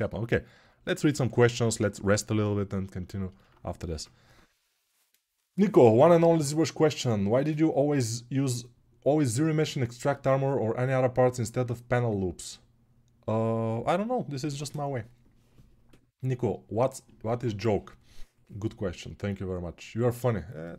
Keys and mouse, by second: 3.8 ctrl+s.